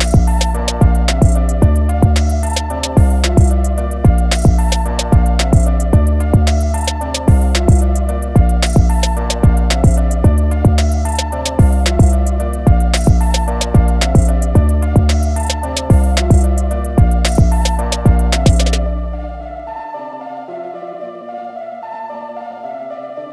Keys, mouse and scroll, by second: 0.0 scroll down 1, 1.7 scroll up 1, 3.1 click, 6.0 click, 7.5 alt+scroll down 2, 8.5 click, 12.2 click, 16.1 click, 19.9 click, 22.7-23.1 alt+scroll down 2.